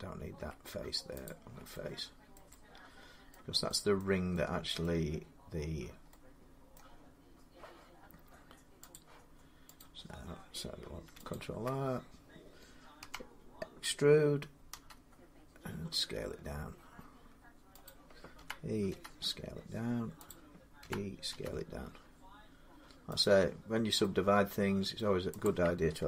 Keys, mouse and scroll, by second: 0.2 x, 1.1 click, 2.2 middle click, 3.1 middle click, 3.8 middle click, 4.6 middle click, 5.0-5.4 scroll up 5, 5.5 scroll down 2, 6.4 scroll, 6.6 middle click, 8.7 click, 9.6 click, 10.4 scroll, 11.1 alt+click, 11.2 alt+click, 12.8 e, 14.5 s, 17.7-22.2 drag, 18.2-18.7 typing, 20.6-21.1 typing, 23.0 click, 24.8 middle click, 24.9 Escape, 25.2 click.